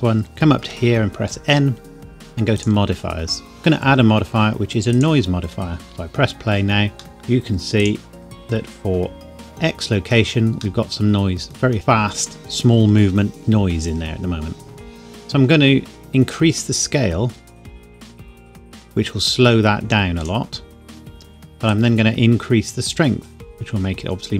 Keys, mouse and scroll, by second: 0.6 n, 2.5 click, 5.8 space, 7.0 middle click, 7.8 click, 10.4-10.7 scroll up 1, 10.8 middle click, 11.7-12.5 scroll down 1, 16.3 click.